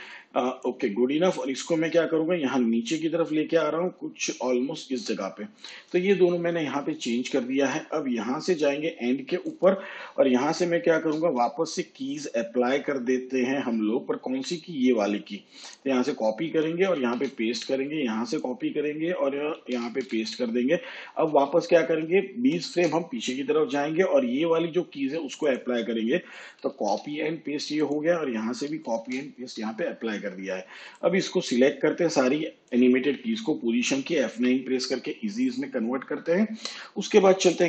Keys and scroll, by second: 16.6 ctrl+c, 16.9 ctrl+v, 19.5 ctrl+c, 19.8 ctrl+v, 21.8 shift+Page_Up, 26.4 ctrl+c, 26.7 ctrl+v, 28.6 ctrl+c, 28.9 ctrl+v, 34.2 F9.